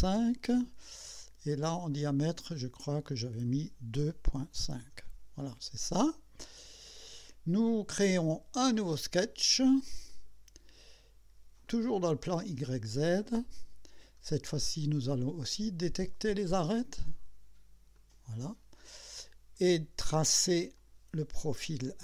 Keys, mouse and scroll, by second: 0.2 KP_Enter, 1.9 click, 3.1 click, 4.0 KP_2, 4.3 KP_Decimal, 4.6 KP_5, 4.8 KP_Enter, 6.9 click, 10.1 click, 11.7 click, 13.2 click, 14.2-14.5 scroll up 1, 15.8 click, 17.9 click, 18.6-19.2 scroll up 2, 20.8 click.